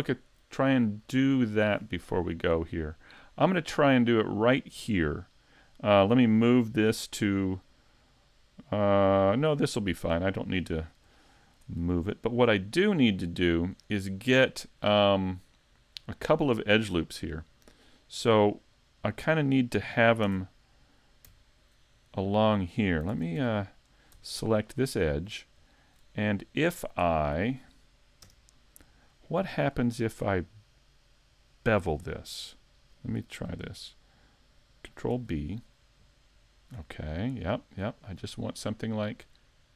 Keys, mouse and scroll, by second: 1.9-2.7 scroll down 2, 2.7 shift+middle click, 3.7-4.2 scroll up 3, 4.2 right click, 9.9-10.4 scroll up 3, 10.4 shift+middle click, 10.8-11.2 scroll up 2, 11.2 shift+middle click, 11.7 middle click, 13.0 shift+middle click, 13.4 scroll up 2, 13.8 scroll down 5, 14.2 shift+middle click, 20.3 Tab, 21.4 alt+right click, 22.5 middle click, 23.1 ctrl+Tab, 24.4 middle click, 25.7 shift+middle click, 26.2 middle click, 27.1 shift+middle click, 28.2 KP_Decimal, 29.2 middle click, 29.9-30.3 scroll up 3, 30.3 middle click, 35.1 ctrl+b.